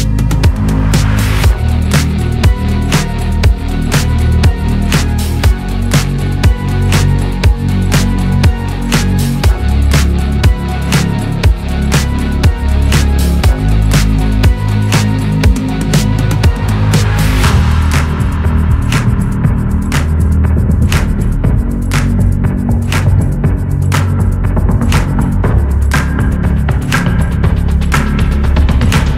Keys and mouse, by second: 3.7 click, 9.1 drag, 14.0 click, 26.3 ctrl+click.